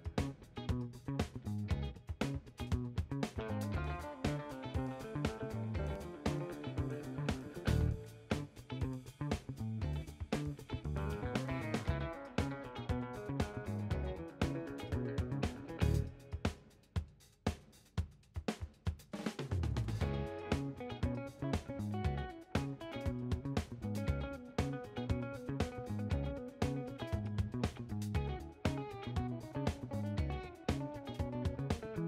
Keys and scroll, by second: 0.3-1.7 typing, 2.0 Left, 2.3 Right, 3.0 shift+Left, 3.3 shift+Right, 3.5 Delete, 3.8 Left, 4.9 0, 5.8 7, 6.5 1, 8.0 5, 9.6 1, 23.9-28.4 typing, 31.1 0.